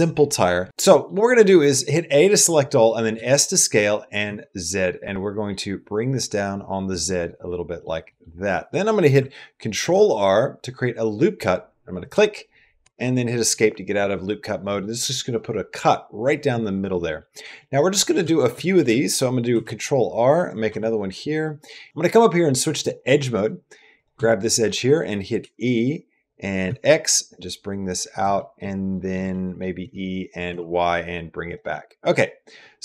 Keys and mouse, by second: 0.7 middle click, 1.3 middle click, 2.1 middle click, 2.4 middle click, 2.9 s, 7.0 middle click, 7.9 middle click, 8.3 middle click, 9.6 ctrl+r, 13.1 click, 17.0 click, 17.4 middle click, 18.2 shift+middle click, 18.4 middle click, 19.3 ctrl+r, 21.4 middle click, 21.9 1, 22.6 click, 24.1 shift+click, 24.3 middle click, 24.8 click, 25.2 e, 28.2 middle click, 28.4 click, 29.1 click, 29.6 e, 31.3 e, 31.6 click, 32.1 click, 32.5 middle click.